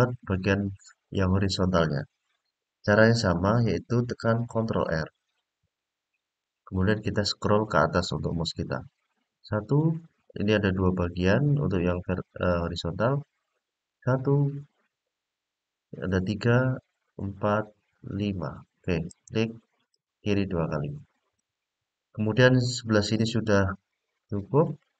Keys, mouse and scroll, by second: 5.0 ctrl+r, 19.7 click, 21.1 click, 23.6-24.9 middle drag.